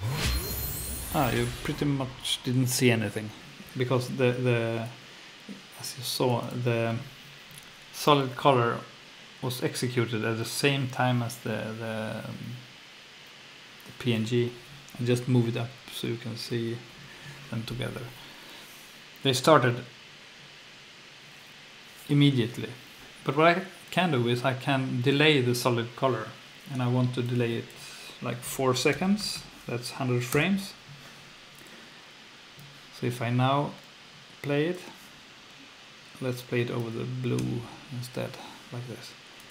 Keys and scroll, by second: 15.6 super+Up, 16.5 super+Down, 28.9 i, 29.2 0, 30.3 Return, 37.4 F2.